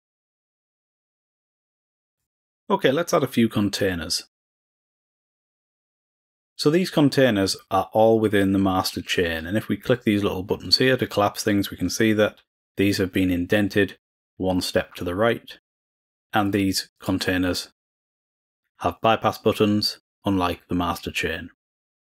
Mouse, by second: 0.9 click, 2.0 click, 3.7-4.8 drag, 4.9 drag, 5.1 click, 5.7 click, 6.0 click, 9.0-9.6 drag, 9.7 click, 10.6 click, 11.3 click, 16.4 click, 16.9 click, 17.4 click, 17.9 click, 18.3 click, 18.9 click.